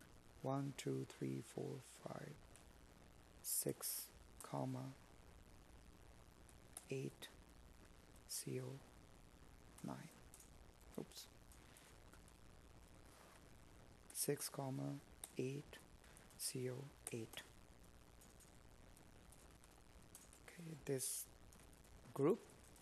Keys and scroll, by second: 8.9 Up, 10.2 Escape, 12.2 space, 13.9 Escape.